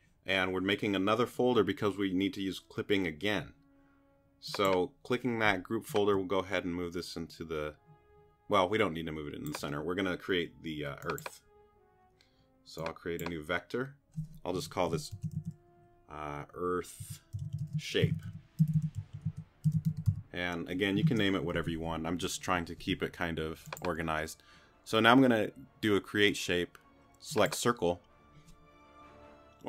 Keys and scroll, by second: 14.9-20.6 typing, 21.0 Return.